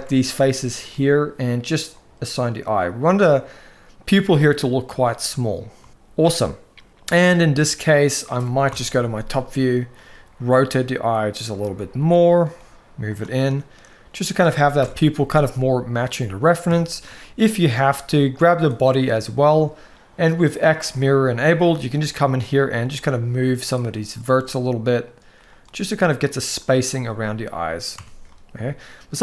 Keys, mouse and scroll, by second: 0.4 alt+shift+click, 1.6 click, 2.6 click, 5.5 Tab, 8.4 KP_7, 9.7 r, 12.2 g, 13.2-14.1 middle drag, 14.5 KP_1, 15.8 click, 16.5 Tab, 17.0 shift+middle click, 18.2 click, 21.0 click, 21.4 middle click, 22.5 g, 24.2 g, 25.4 g, 26.8 middle click, 27.7 Tab, 28.0-29.2 middle drag.